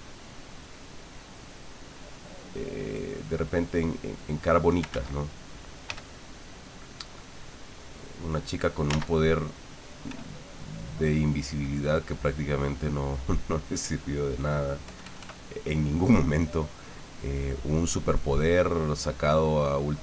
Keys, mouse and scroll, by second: 0.8 click, 1.7 click, 2.5 click, 3.7 click, 4.9 ctrl+z, 5.8 f, 6.6 click, 7.5-8.6 drag, 8.9 ctrl+z, 10.1 f, 10.6 click, 11.5 click, 12.9 middle click, 13.6 middle click, 14.9 KP_Add, 16.8-18.0 drag, 18.3 click, 19.3 click.